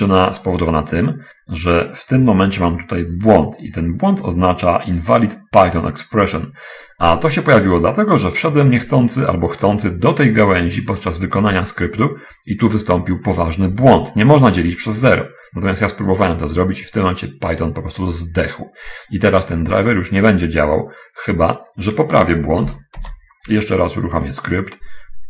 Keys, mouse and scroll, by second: 1.3 right click, 4.5 click, 9.2 click, 10.2-11.6 drag, 16.5 click, 22.7 BackSpace, 23.4 BackSpace, 24.2 click.